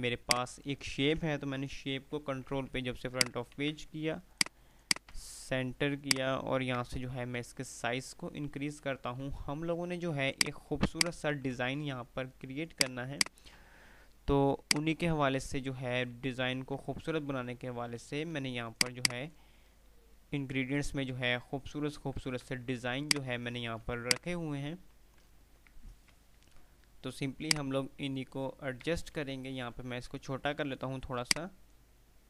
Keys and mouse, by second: 0.1 F2, 1.6 shift+Page_Up, 3.0 shift+click, 3.4 c, 4.4 click, 6.1 shift+click, 7.4 ctrl+r, 9.7 F3, 9.7 2, 10.4 click, 11.4 F2, 11.6 3, 12.9 click, 14.7-15.6 shift+drag, 16.0 ctrl+r, 18.9 click, 20.6 ctrl+r, 21.0-22.4 typing, 23.1 click, 25.0 ctrl+r, 27.6-28.4 shift+drag, 29.4 ctrl+r, 31.4-32.1 ctrl+drag.